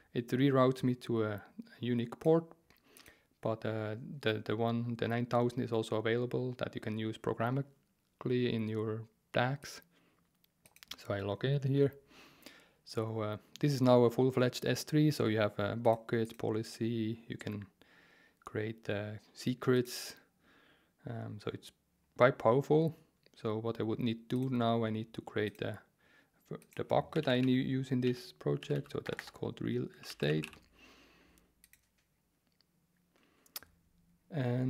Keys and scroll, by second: 26.9-30.9 typing.